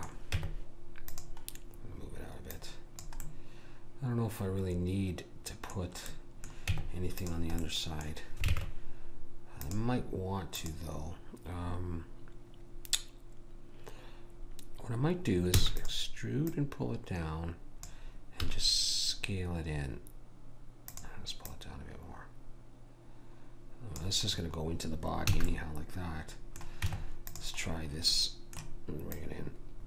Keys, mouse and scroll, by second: 0.4 Tab, 2.5 click, 3.3 right click, 3.8-5.0 middle drag, 6.1-7.3 middle drag, 6.7 Tab, 8.5 ctrl+Tab, 10.5 click, 15.6 e, 16.5 click, 18.5 s, 21.5 click, 25.0 middle click, 25.3 a, 26.8 Tab, 29.1 click.